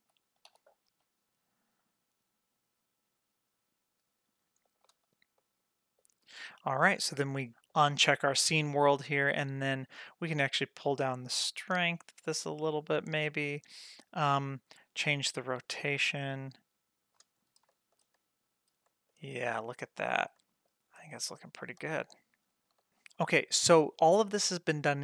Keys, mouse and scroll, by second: 0.4 r, 5.1 scroll down 1, 5.4-6.0 middle drag, 7.0-17.2 drag, 17.4 scroll up 2, 17.7 shift+middle click, 18.2 middle click, 18.3-18.9 scroll down 3, 18.9 shift+middle drag, 19.2-19.7 middle drag, 20.0 shift+middle click, 20.0 scroll down 1, 20.4 middle drag, 20.9-21.6 shift+scroll down 2, 21.6 scroll down 2, 22.4 scroll up 1, 22.8 shift+middle drag, 22.9 scroll down 1.